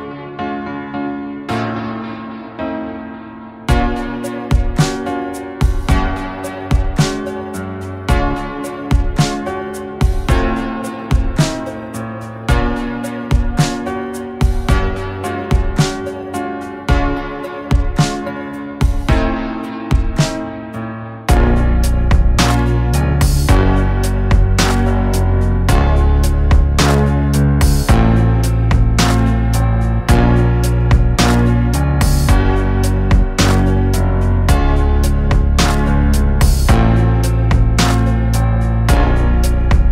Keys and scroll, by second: 8.3 Delete, 12.4 Delete, 13.4 Escape, 15.5 KP_1.